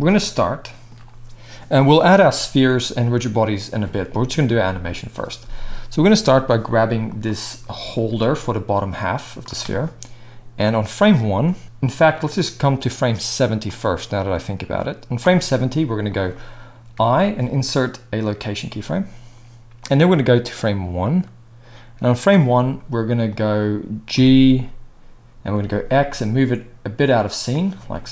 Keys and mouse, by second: 4.4-7.2 shift+middle drag, 7.2-7.9 drag, 7.9-9.4 right drag, 7.9 g, 9.4-10.6 middle drag, 10.6-11.6 drag, 11.6-13.6 middle drag, 13.6-16.2 drag, 16.2-19.8 middle drag, 16.9 i, 19.8-23.4 drag, 23.4-28.1 middle drag, 24.1 g.